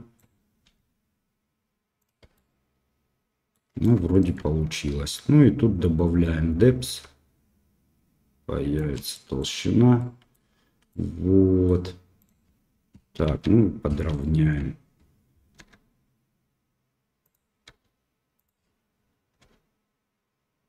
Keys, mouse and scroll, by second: 0.6 s, 2.3-3.5 middle drag, 3.8 shift+middle click, 7.0-8.9 shift+drag, 9.1 middle click, 9.9 middle click, 10.9 middle click, 12.1 click, 12.9 KP_1, 13.2 KP_3, 14.1 shift+middle click, 15.5 r, 17.6 g, 19.4 g.